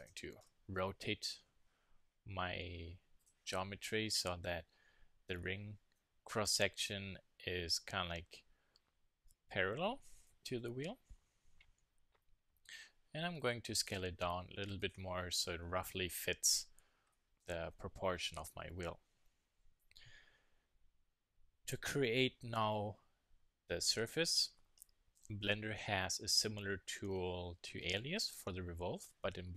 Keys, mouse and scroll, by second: 3.2-5.0 drag, 5.4-10.6 middle drag, 10.6 KP_1, 11.0 KP_3, 12.3 s, 14.9-16.6 drag, 17.1 middle click, 18.4 KP_1, 18.7 KP_3.